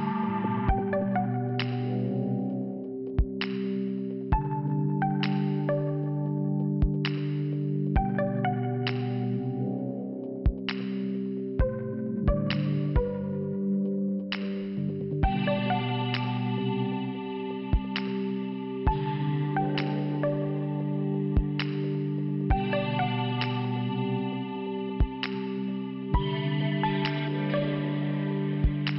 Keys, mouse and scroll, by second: 0.9 click, 2.7 click, 5.1 click, 6.1 scroll down 1, 6.6 click, 7.9 click, 8.9 click, 10.8 click, 10.9 click, 11.4 click, 12.8 click, 14.4 click, 16.0 click, 16.2 click, 16.9 click, 19.6 n, 20.3 scroll up 1, 21.4 k, 22.2 scroll up 1, 24.1 click, 25.1 click, 26.3 click, 27.3 click.